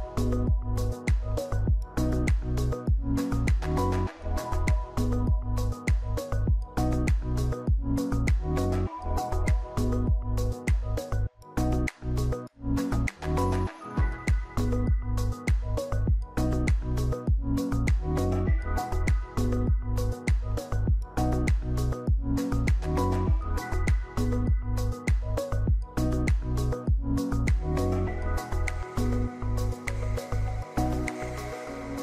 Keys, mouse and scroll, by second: 7.5 click, 15.4 ctrl+c, 15.4 ctrl+v, 28.0 ctrl+c, 28.0 ctrl+v.